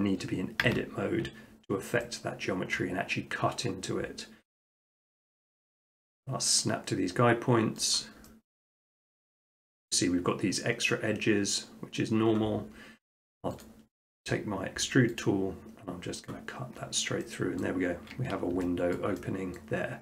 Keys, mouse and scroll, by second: 0.6 Tab, 1.5-2.6 middle drag, 2.8-3.8 middle drag, 5.8-6.8 drag, 7.9 click, 8.6-9.7 middle drag, 13.6-14.7 drag, 15.2-17.4 drag, 17.6 middle click, 19.0 shift+middle click, 19.6 middle click, 19.7 middle click, 19.8 middle click.